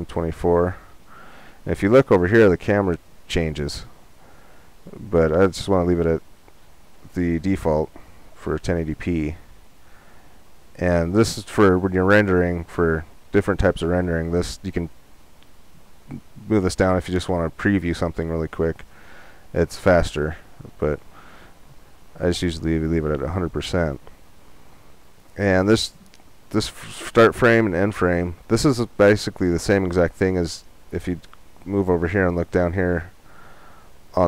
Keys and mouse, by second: 5.1-7.1 drag, 12.5-14.4 drag, 18.8-34.2 drag.